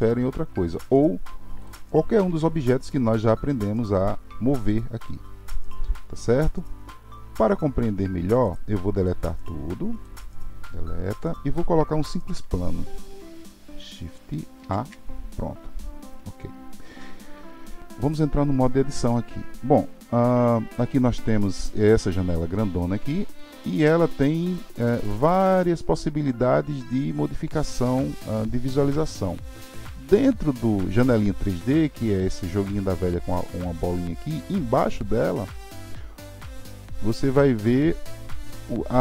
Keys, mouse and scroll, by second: 8.4 click, 9.1 click, 11.1 Delete, 15.8-16.1 scroll up 3, 16.5-17.8 scroll up 3, 18.0-21.0 drag, 24.4-27.6 drag, 37.3 click.